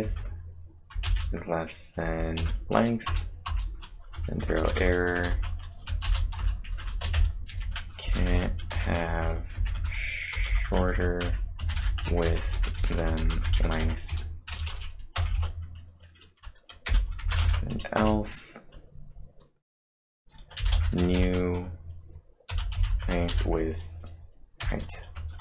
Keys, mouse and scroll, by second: 0.0-2.4 typing, 3.1 Return, 3.5 Return, 4.2-14.5 typing, 16.9 typing, 18.0 Return, 20.0 typing, 20.6 Return, 21.1 shift+9, 22.3-23.6 typing, 24.6 h.